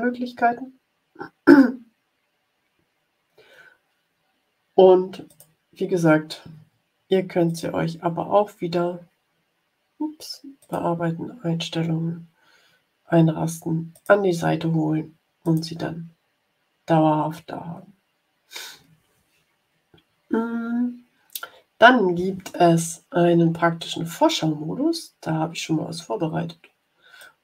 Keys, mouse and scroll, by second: 5.2 click, 7.4 click, 10.5 click, 13.9 click, 15.3 click, 23.5 scroll down 2, 24.4-25.8 scroll down 6, 27.1 click.